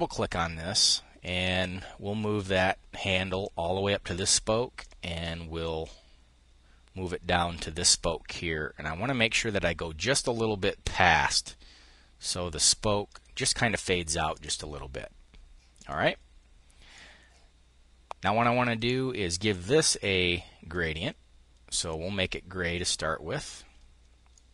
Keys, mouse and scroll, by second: 0.8-3.3 drag, 4.4-13.7 drag, 13.9 click, 15.4 click, 16.5-18.4 drag, 23.9 click.